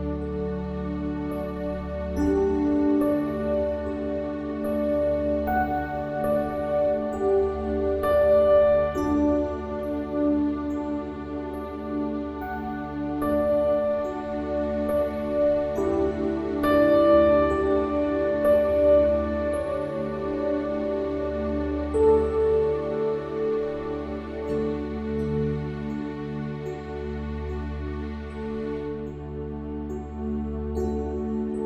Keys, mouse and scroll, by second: 0.3 middle click, 0.6 click, 1.7 s, 3.0 click, 3.8 click, 4.2 KP_1, 8.8 click, 9.2 middle click, 9.8 r, 10.8 click, 11.7 middle click, 12.5 KP_1, 14.2 b, 14.8 b, 17.7 middle click, 18.2 middle click, 18.6 Tab, 19.4-21.2 drag, 21.7 middle click, 22.2 Tab, 23.1-25.1 drag, 25.1 r, 26.5 KP_1, 28.6 click, 30.9 middle click, 31.4 Tab.